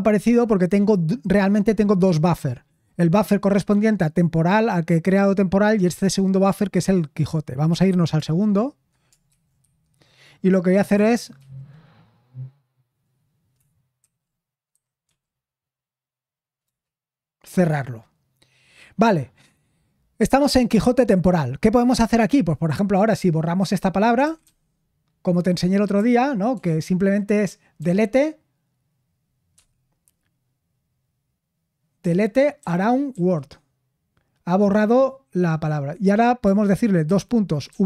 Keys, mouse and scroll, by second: 9.2-10.2 typing, 24.1-24.9 typing, 32.8-33.6 typing, 37.0-37.7 typing.